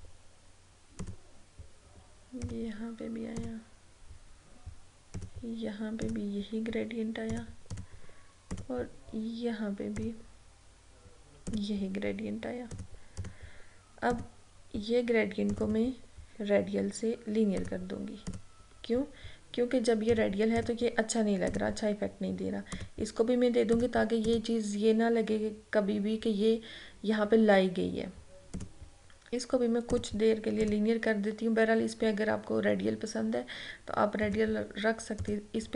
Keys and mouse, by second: 28.6 click, 34.3 click.